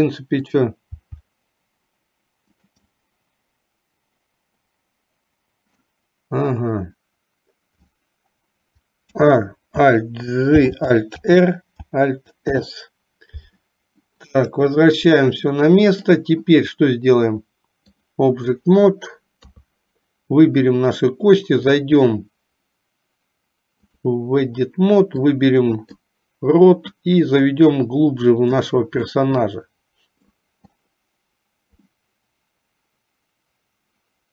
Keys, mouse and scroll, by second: 0.6 click, 1.2 g, 3.1-6.0 middle drag, 9.2 a, 10.7 alt+g, 11.3 alt+r, 12.6 alt+s, 14.3 click, 15.5 middle click, 17.2-18.2 drag, 19.5 KP_3, 21.7-24.3 drag, 25.5 click, 27.0-28.7 drag, 29.2-30.6 middle drag, 31.9-34.3 middle drag.